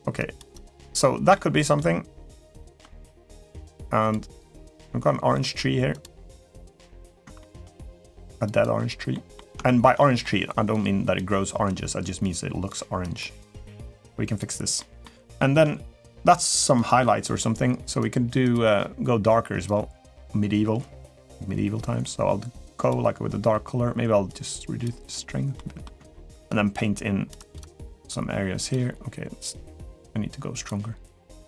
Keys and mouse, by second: 0.3 click, 1.1 middle click, 2.3 shift+middle click, 2.9 click, 3.2 click, 3.6 click, 4.5 click, 5.1 middle click, 5.7 click, 6.2 click, 7.2 shift+middle click, 7.6 click, 8.2 click, 8.9 middle click, 9.4 shift+middle click, 9.7 middle click, 10.5 click, 12.0 click, 12.8 click, 13.4 middle click, 14.0 click, 14.5 middle click, 15.1 shift+middle click, 16.5 click, 17.7 click, 18.3 click, 24.1 click, 25.3 middle click, 25.9 shift+middle click, 26.2 click, 27.1 click, 27.6 click, 30.0 click, 31.2 click.